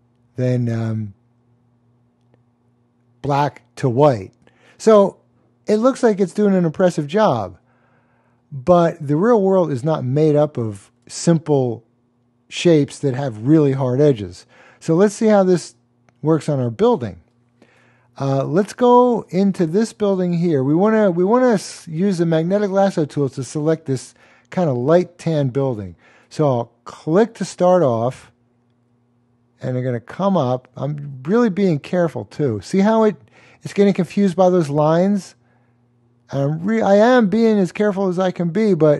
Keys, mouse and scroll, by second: 0.4 click, 15.6 click, 18.4-19.4 super+click, 19.5 super+space, 19.6 super+click, 19.7 super+space, 19.8 super+space, 27.0 click.